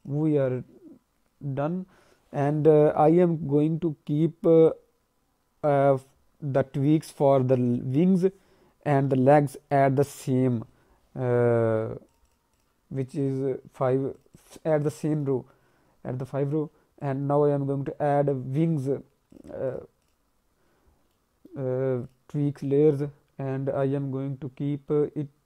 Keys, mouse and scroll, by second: 12.0 click, 12.2 click, 12.5 click, 13.1 click, 14.1 click, 14.3 click, 14.7 click, 15.1 click, 16.9 click, 19.7 click, 20.0 click, 21.1 alt+middle click, 22.0 click.